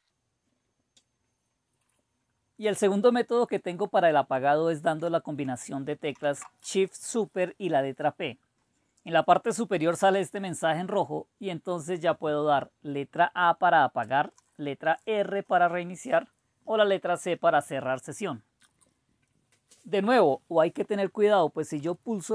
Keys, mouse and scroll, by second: 6.2 super+p, 21.8 typing.